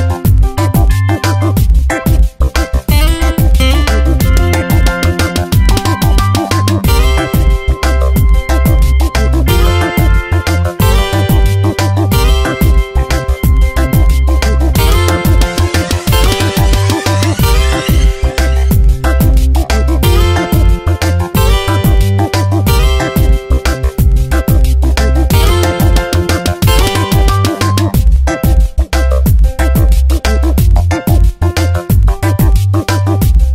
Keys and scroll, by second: 8.6 space, 9.9 Return, 11.3 ctrl+shift+], 14.4 space, 15.1 v, 21.2 space, 23.6 space, 25.4 space, 26.8 space.